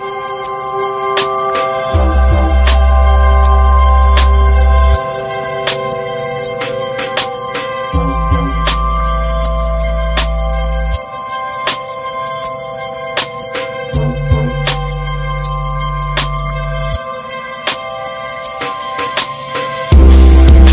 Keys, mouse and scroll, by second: 0.6 click, 0.9 middle click, 1.4 a, 3.6-6.2 drag, 7.6-8.5 middle drag, 8.5 n, 9.1 middle click, 9.6 a, 10.2-10.7 scroll up 3, 10.5 shift+middle click, 11.0-11.7 middle drag, 11.7 click, 11.9 shift+a, 14.0 scroll up 1, 14.3 middle click, 14.6-15.9 right drag, 15.9 click, 16.7-17.8 drag, 17.9 click, 18.1 click, 18.5 alt+middle click, 18.9 s, 20.2-20.7 shift+middle drag.